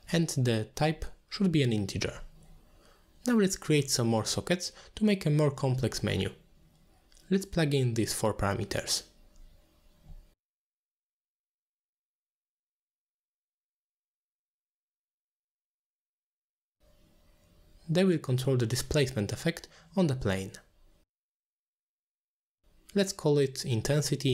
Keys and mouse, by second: 3.1 click, 7.0 middle click, 8.1 middle click, 8.8 click, 9.1 shift+d, 10.5 middle click, 10.8 middle click, 11.1 click, 11.6-12.0 drag, 12.2 middle click, 12.5-13.2 drag, 13.4 click, 13.7 middle click, 13.9 shift+d, 14.7-15.3 drag, 15.6-18.2 drag, 18.6 middle click, 18.9 click, 19.7 click, 20.1 ctrl+h, 20.3 middle click, 20.6 click, 21.1 ctrl+h, 21.8 middle click, 22.2 middle click, 22.6 click, 23.0 ctrl+h, 23.3 click, 23.7 middle click.